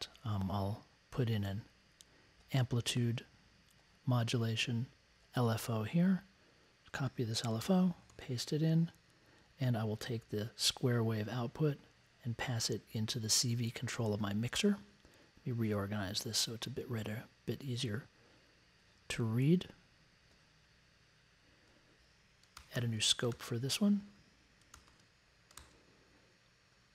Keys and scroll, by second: 7.6 super+c, 8.1 super+v, 22.5 super+c, 22.7 super+v, 23.3 super+c, 24.7 super+c, 24.8 super+v.